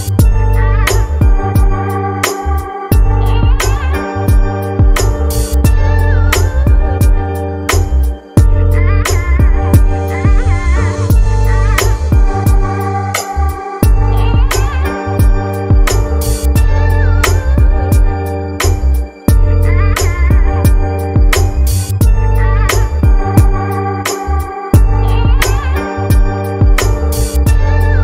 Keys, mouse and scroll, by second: 12.0-16.7 drag, 16.7-17.9 scroll down 1, 17.9-25.1 drag.